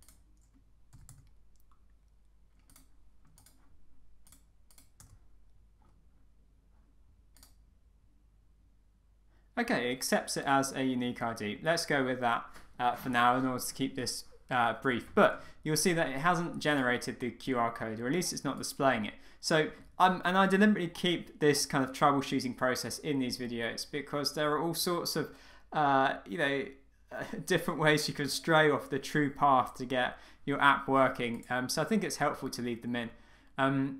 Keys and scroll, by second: 5.0 Return.